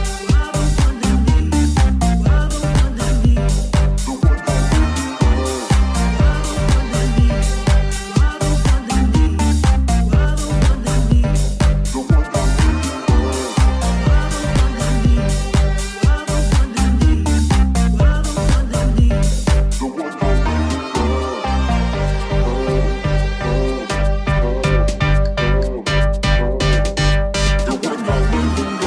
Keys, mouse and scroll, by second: 2.9-12.1 shift+middle drag, 6.9 g, 8.1 Tab, 8.9 e, 12.1 middle click, 13.2 middle click, 14.2-16.7 middle drag.